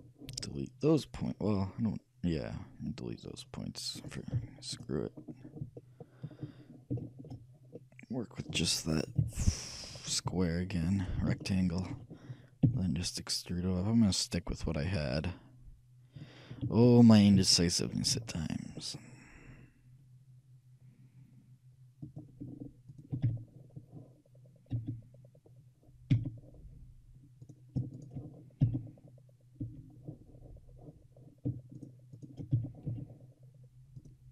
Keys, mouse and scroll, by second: 0.4 c, 4.2-5.8 right drag, 4.4 x, 5.8-9.2 middle drag, 9.2 shift+KP_3, 10.5 middle click, 11.1-12.9 shift+right drag, 12.7 e, 17.2-19.0 shift+middle drag, 18.2 e, 23.0-24.7 shift+right drag, 23.4 f, 24.8 f, 26.2 f, 27.5-29.8 right drag, 28.9 f, 29.8 f, 31.8-34.3 right drag, 32.6 f, 33.1 a.